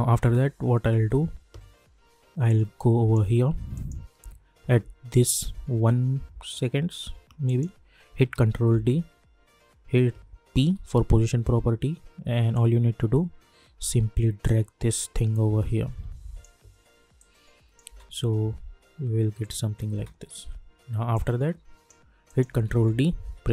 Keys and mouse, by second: 0.2 space, 2.4 click, 5.1 =, 7.4 click, 8.6 ctrl+d, 10.5 p, 12.5-17.8 drag, 17.8 space, 19.9 space, 21.1 click, 22.6 ctrl+d, 23.4 p.